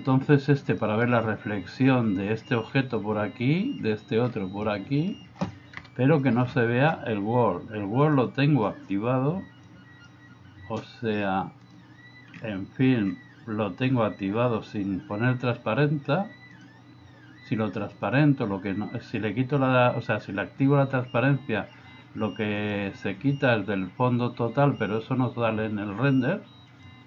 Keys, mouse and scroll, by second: 0.8 middle click, 4.7 middle click, 5.7 KP_0, 9.6 click, 11.7 click, 18.0 click, 22.6 click, 26.8 click.